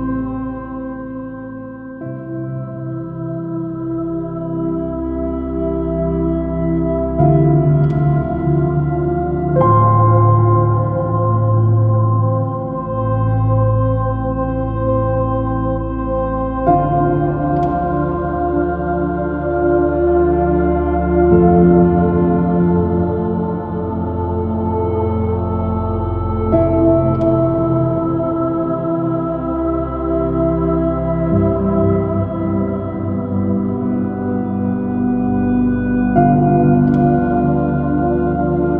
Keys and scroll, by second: 0.5 super+i, 1.6 x, 2.1 x, 2.7 alt+super+z, 5.0 super+z, 12.8 super+-.